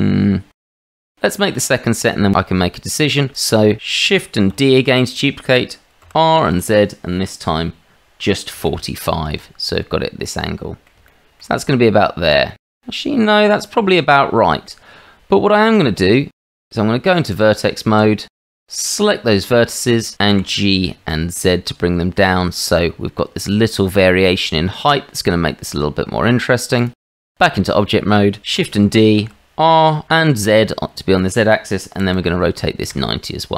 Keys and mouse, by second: 1.1-1.9 drag, 4.5 shift+d, 10.2-10.8 drag, 11.0-11.4 shift+middle drag, 11.8-14.6 middle drag, 15.5 click, 16.5 middle drag, 16.8 Tab, 17.9 shift+z, 18.3 click, 19.3 shift+z, 19.7 shift+click, 20.3 g, 27.0 middle click, 27.2 Tab, 28.6 shift+d.